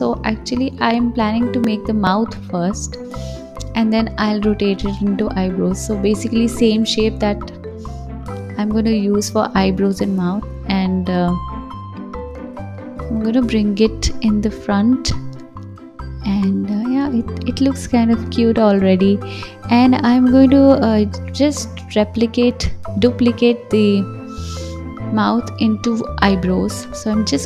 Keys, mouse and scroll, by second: 0.0 click, 0.8 g, 2.9 click, 3.3 g, 4.4 click, 5.0 s, 6.4-7.6 drag, 7.6 right click, 8.5 g, 9.7 s, 10.8 g, 12.9 KP_3, 14.3 g, 16.5 KP_1, 17.6 alt+z, 17.9 click, 18.2 scroll up 3, 19.4-22.3 drag, 23.1 click, 23.7 click, 24.3 click, 25.1 s, 26.0 g.